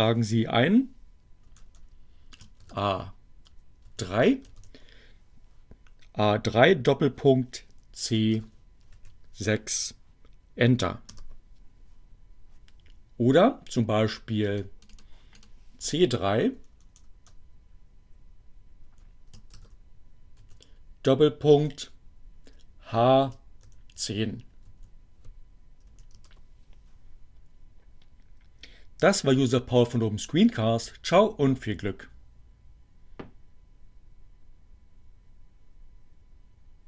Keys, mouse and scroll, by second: 1.5 BackSpace, 3.9 shift+a, 5.3 shift+3, 5.7 shift+., 9.3 shift+c, 9.9 shift+6, 11.7 Return, 14.3-16.7 drag, 16.8 click, 17.2 BackSpace, 19.5 Delete, 20.9 shift+c, 21.7 3, 22.2 shift+., 24.7 shift+h, 25.3 1, 27.1 0, 27.3 Return.